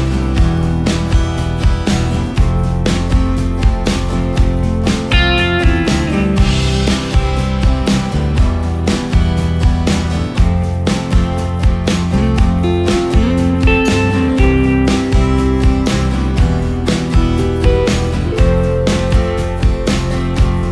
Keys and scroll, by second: 0.3 d, 3.2 ctrl+g, 3.6 ctrl+space, 8.5 ctrl+space, 10.8 ctrl+space, 12.5 space, 15.8 space.